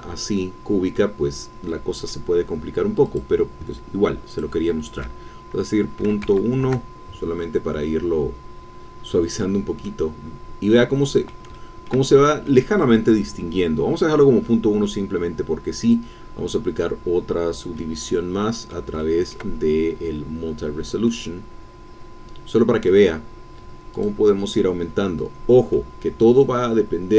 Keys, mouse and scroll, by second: 1.2-1.6 scroll up 1, 1.7-2.8 middle drag, 3.0 click, 4.3 click, 6.0 KP_Decimal, 6.2 KP_1, 6.7 KP_Enter, 7.5-7.8 scroll down 2, 7.8-10.0 drag, 10.0-10.5 scroll up 2, 10.7-12.7 middle drag, 15.8 click, 17.8-18.9 middle drag, 19.0 shift+middle click, 21.0-23.6 drag, 23.9 click, 25.2-25.6 scroll down 1, 25.7-27.1 middle drag.